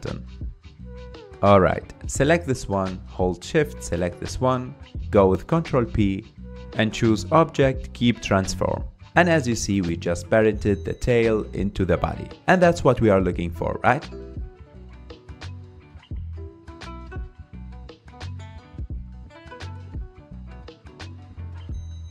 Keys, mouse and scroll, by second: 0.1 click, 0.3-0.8 scroll up 4, 0.8-1.5 middle drag, 1.5 scroll up 2, 1.7-3.2 shift+middle drag, 3.2 shift+click, 4.9 ctrl+p, 7.8 click, 8.1-8.6 scroll down 4, 9.0 drag, 9.3-10.1 middle drag, 10.1 g, 12.7 ctrl+Tab, 13.1 click, 13.9 g, 15.4 Tab, 16.3 Tab, 17.2 click, 18.0 ctrl+Tab, 18.7 click, 19.8 g, 21.1 click, 21.4-22.1 middle drag.